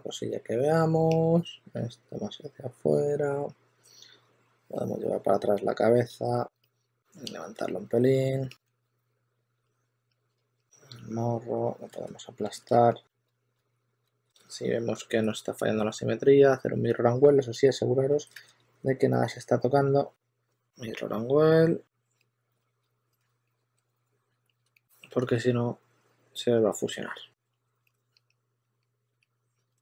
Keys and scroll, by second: 0.0-0.2 typing, 1.4 typing, 6.7 typing, 8.6 s, 10.3 s, 10.6 2, 11.8 super+z, 12.8-15.0 typing, 16.8 s, 18.3 super+z, 19.9 2, 22.4-24.2 typing, 27.4 s, 29.5 shift+z, 29.6 shift+z.